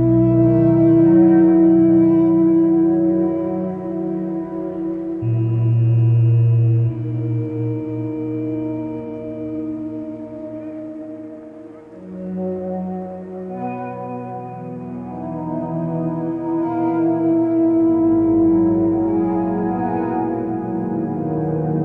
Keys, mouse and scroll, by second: 5.8 p, 6.3 p.